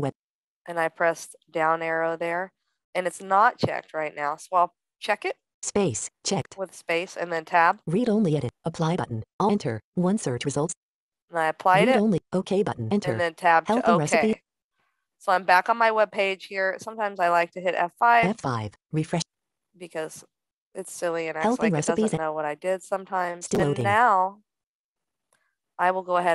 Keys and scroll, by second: 17.1 F5.